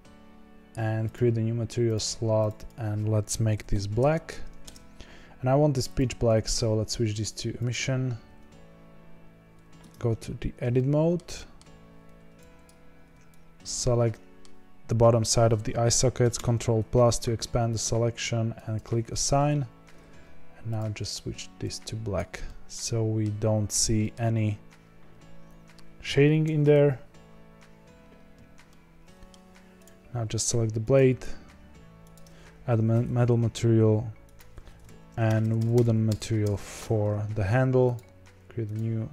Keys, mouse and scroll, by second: 1.1 click, 2.3 click, 2.5-9.8 drag, 9.8 Tab, 10.3-10.7 scroll up 5, 10.7-12.6 shift+middle drag, 12.6 click, 13.6 shift+click, 14.0-16.3 middle drag, 16.3 ctrl+KP_Add, 18.7 click, 19.4 Tab, 21.6 click, 22.4-24.1 middle drag, 24.1-28.6 scroll down 1, 28.6-29.8 middle drag, 29.8 click, 32.1 click, 32.9 Tab, 34.2 click, 35.0-35.4 ctrl+KP_Add, 35.5 ctrl+KP_Add, 35.7 ctrl+KP_Add, 36.0 ctrl+KP_Add, 36.4 ctrl+KP_Add, 37.9-39.1 drag.